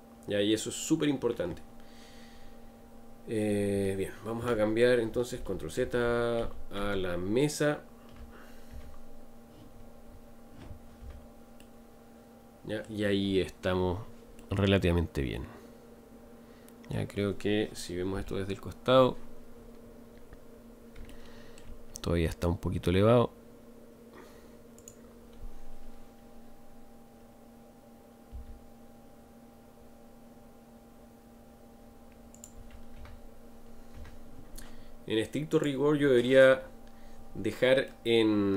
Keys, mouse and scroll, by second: 5.4 ctrl+z, 5.8 ctrl+z, 6.0 ctrl+z, 6.4 ctrl+z, 6.8 ctrl+z, 8.7 Tab, 11.8-13.2 middle drag, 13.2-13.9 scroll up 6, 14.3-19.1 middle drag, 19.5-20.5 scroll up 5, 20.5-21.1 scroll up 3, 21.1-21.8 shift+middle drag, 21.8 scroll up 2, 33.9 Tab, 35.5 click, 36.5 scroll up 1, 37.8-38.5 middle drag.